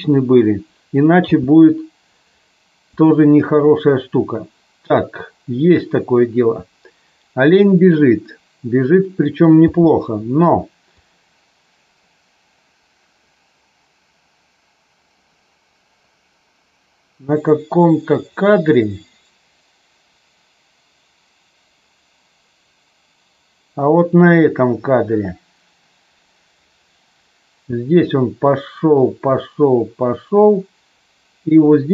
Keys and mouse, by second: 1.2 space, 2.9 click, 9.7 space, 11.0-31.9 drag.